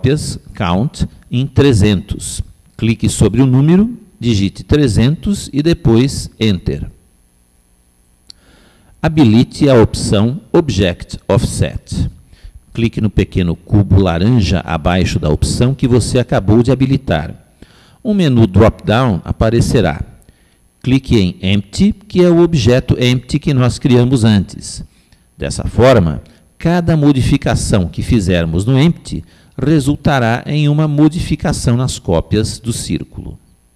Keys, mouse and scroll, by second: 1.4 click, 3.8 0, 13.7 click, 16.3 click.